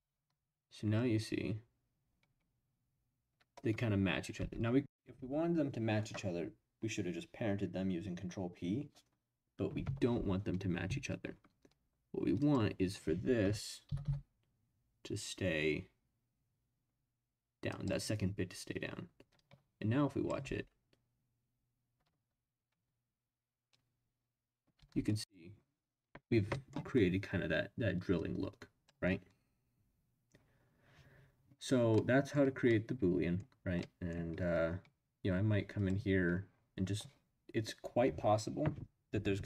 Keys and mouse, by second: 4.3 space, 12.4 click, 13.4 f, 13.8 g, 14.0 y, 17.7 click, 19.4-20.3 drag, 20.4 space, 24.8 space, 26.5 middle click, 28.1 click, 32.0 middle click, 32.7-33.4 middle drag, 33.8-34.1 middle drag, 35.7 click.